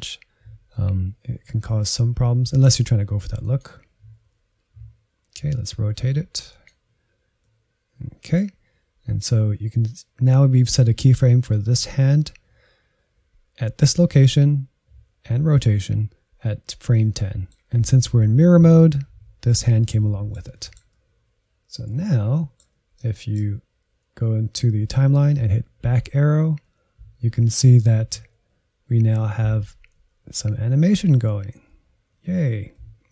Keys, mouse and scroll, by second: 4.6 r, 7.4-20.0 middle drag, 20.6-25.7 middle drag, 25.7 Left, 26.2 Left, 26.6 Left, 26.9 Left, 27.5 Left, 27.9 Left, 28.3 Left, 28.6 Left, 29.4 Right, 29.7 Right, 30.0 Right, 30.3 Right, 30.6 Right, 30.9 Right, 31.2 Right, 31.5 Right, 32.4 Left, 32.7-33.1 middle drag.